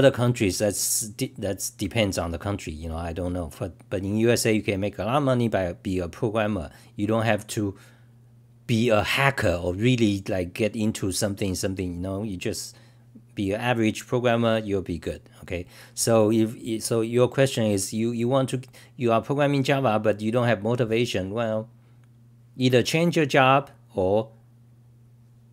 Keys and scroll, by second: 24.0 typing.